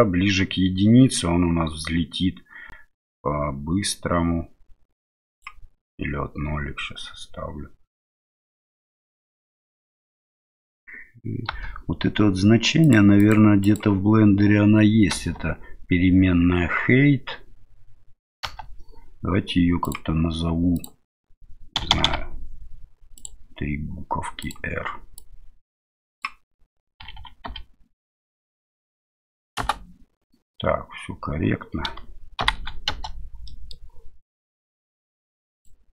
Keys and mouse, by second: 11.5 space, 12.8 click, 13.2 click, 13.6 click, 15.1 space, 18.4 space, 19.9-23.2 drag, 21.9 r, 22.0 r, 24.5-30.0 drag, 27.2 r, 32.4 shift+Left, 32.9 space, 33.4 middle click, 35.6-35.9 drag.